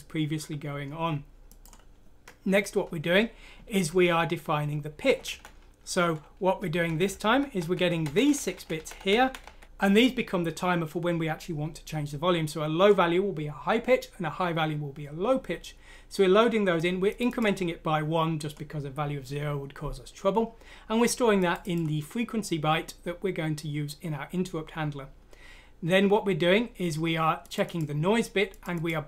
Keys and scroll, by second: 3.8 Down, 5.2 Right, 6.8 Down, 7.0 Down, 7.2 Down, 7.5 Right, 8.0 Right, 8.3 Right, 8.5 Right, 8.7 Right, 8.9 Right, 9.2 Right, 9.4 typing.